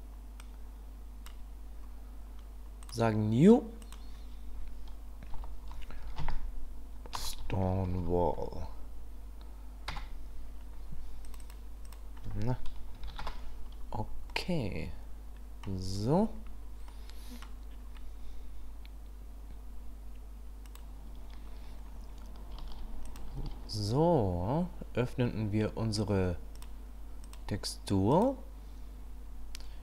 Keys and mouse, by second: 0.5 click, 2.8 click, 3.9-11.0 drag, 8.0 l, 11.3-13.8 drag, 14.3-15.6 middle drag, 16.9 middle click, 23.1 click, 23.4 shift+a.